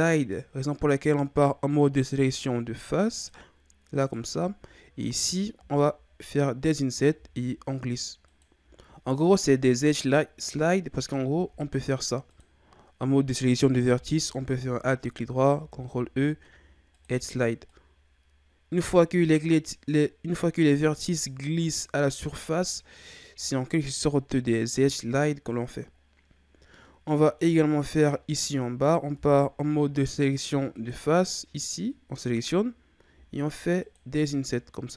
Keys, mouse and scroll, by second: 4.0 right click, 5.5 i, 7.1 i, 11.3 ctrl+Tab, 14.1 alt+right click, 15.6 ctrl+e, 26.6 scroll down 2, 26.8-28.3 middle drag, 28.3-29.1 scroll up 1, 29.1 ctrl+Tab, 31.1 right click, 33.2 i, 34.2 i.